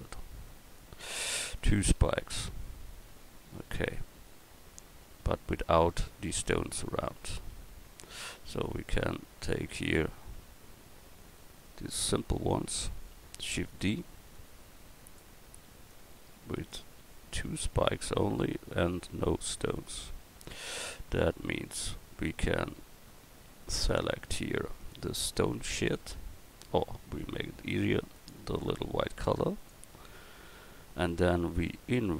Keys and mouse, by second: 7.1 right click, 7.5 Tab, 8.7 Tab, 13.6 shift+d, 19.5 middle click, 20.1 middle click, 21.8 Tab.